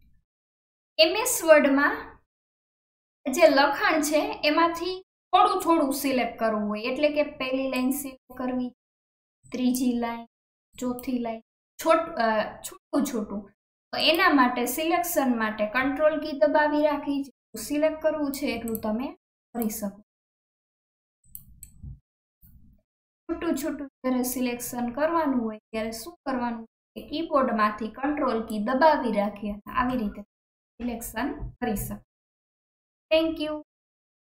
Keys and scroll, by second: 15.8 alt+KP_1.